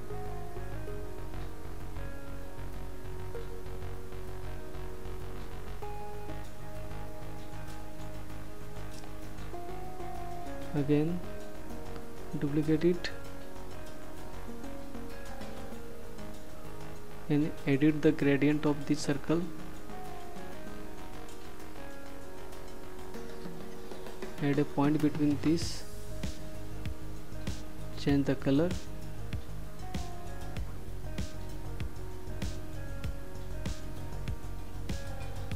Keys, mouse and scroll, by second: 1.8 click, 8.4 ctrl+d, 14.2 click, 19.2 click, 26.9 click.